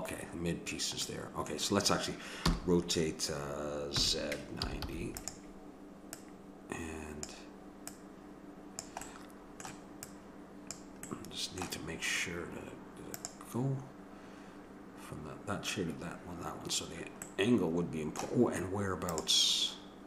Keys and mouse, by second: 1.1-3.5 middle drag, 2.5 r, 6.2-9.8 drag, 9.1 right click, 9.8 middle click, 10.1-11.9 drag, 11.9-13.4 middle drag, 17.4-18.4 middle drag.